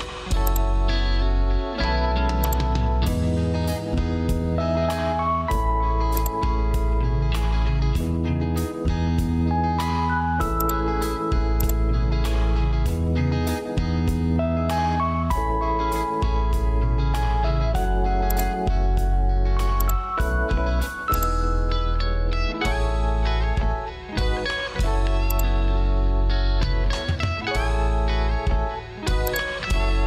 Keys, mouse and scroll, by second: 24.1 Return, 28.3 Escape.